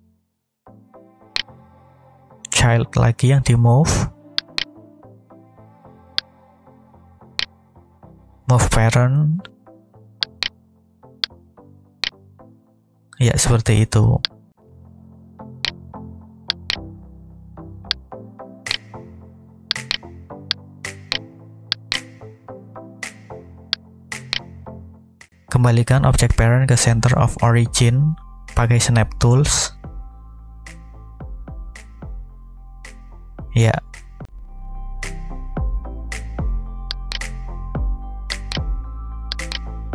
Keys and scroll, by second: 29.8 shift+s.